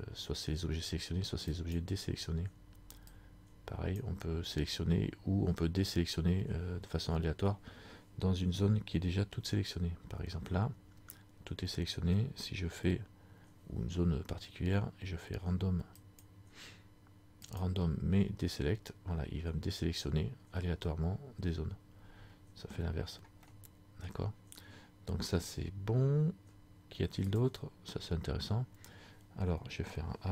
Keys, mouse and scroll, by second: 3.3 click, 9.7 a, 16.1 click, 17.7 click, 23.6 middle click, 27.4 click.